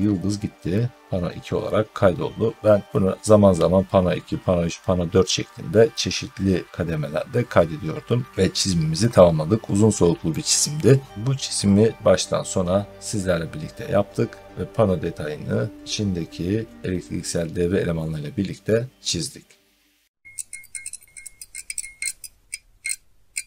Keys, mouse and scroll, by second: 8.3-10.1 scroll up 1, 10.1 middle click.